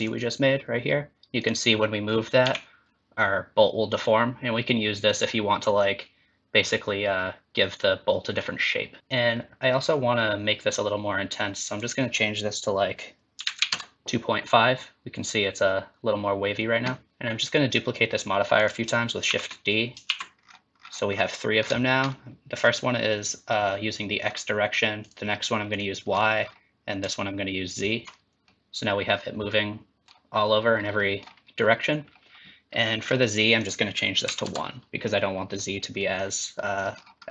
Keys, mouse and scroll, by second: 1.4 click, 2.4 g, 9.0 click, 11.7 click, 17.1 ctrl+z, 17.1 click, 18.5 click, 19.2 shift+d, 20.0 shift+d, 20.4-21.8 scroll down 16, 21.6-22.6 scroll up 15, 22.6-23.1 scroll down 2, 24.2-24.9 scroll down 4, 25.0 click, 26.0-27.0 scroll down 4, 27.3-28.0 ctrl+scroll down 2, 28.4 middle click, 31.0 middle click, 33.0-33.6 scroll down 3, 33.6 click, 36.0 middle click, 36.6 middle click, 36.9-37.2 scroll up 4, 37.2 middle click.